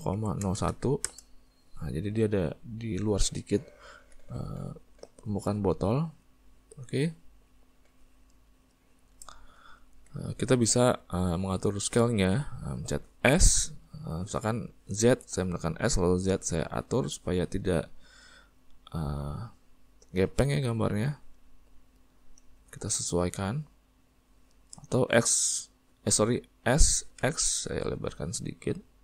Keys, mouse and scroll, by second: 1.1-2.2 drag, 2.2-13.4 middle drag, 13.4 s, 23.3-25.3 middle drag, 25.3 s.